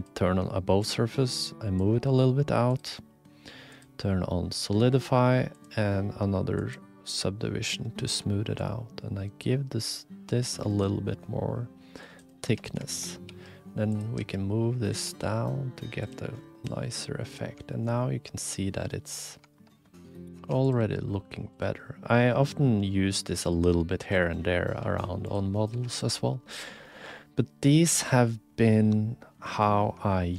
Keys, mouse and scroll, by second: 0.8 shift+click, 2.7-3.8 drag, 5.5-6.8 drag, 8.6-10.8 shift+drag, 11.1 middle click, 11.2 click, 12.4 2, 13.3 g, 14.2 s, 15.0 g, 16.8 middle click, 16.8 click, 17.3 middle click, 17.7 shift+middle click, 18.0 click, 18.9 middle click, 19.5 shift+click, 19.7 middle click, 20.1 click, 20.2 middle click, 20.3 2, 20.7 click, 20.8 g, 21.8-23.3 drag, 23.4 g, 24.8 g, 25.6 click, 25.7 1, 26.0 click, 26.1 g, 27.2 click, 29.0 click, 30.1 shift+click.